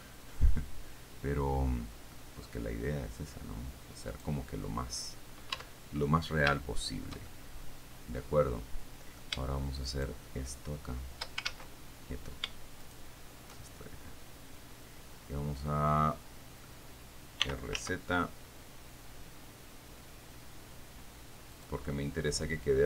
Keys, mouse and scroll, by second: 0.9-2.6 middle drag, 4.4 click, 4.6 middle click, 5.1-5.5 scroll down 1, 6.0 Tab, 6.8-9.6 shift+middle drag, 10.2 shift+right click, 11.8 ctrl+shift+z, 13.2 shift+right click, 14.1-17.1 shift+middle drag, 17.7 r, 18.0 z, 21.8 click, 22.3-22.8 middle drag.